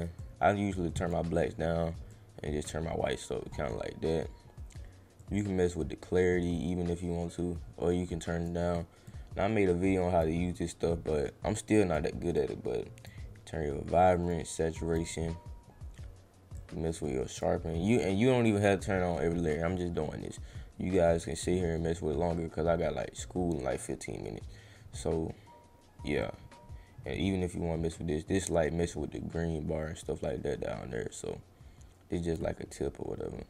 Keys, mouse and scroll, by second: 0.1 click, 2.1 click, 2.9 scroll up 1, 3.5 scroll up 1, 5.2-8.4 drag, 9.1 click, 10.8 scroll down 1, 11.7 click, 12.3 click, 14.1 click, 14.7 click, 15.2 scroll down 1, 16.5 click, 17.8 scroll down 1, 19.7 middle click, 19.7-20.1 scroll up 2, 20.0 middle click, 20.6 scroll up 1, 21.5-21.9 scroll up 2, 22.6 scroll up 1, 23.3 scroll up 1, 25.0 scroll up 1, 26.2-32.3 drag.